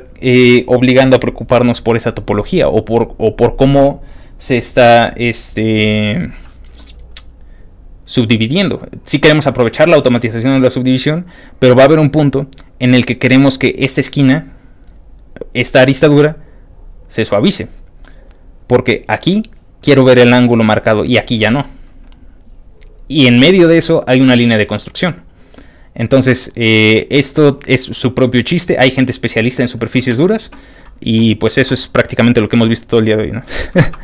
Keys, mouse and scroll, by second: 30.1 ctrl+w, 30.7 middle click, 30.7 scroll up 2, 30.7 middle click, 33.5 ctrl+w, 33.5 ctrl+click, 33.8 ctrl+c.